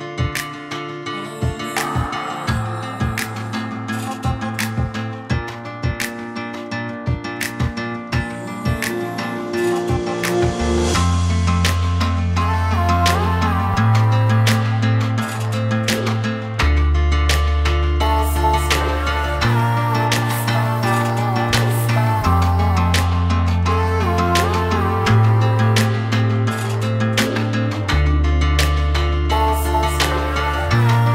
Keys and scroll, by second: 25.7 2, 26.1 4, 26.6 8, 27.0 Return.